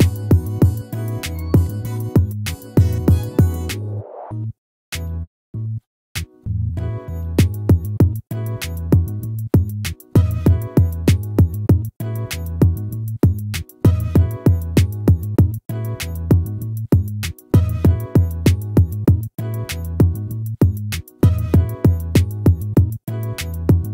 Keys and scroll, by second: 23.2 ctrl+-.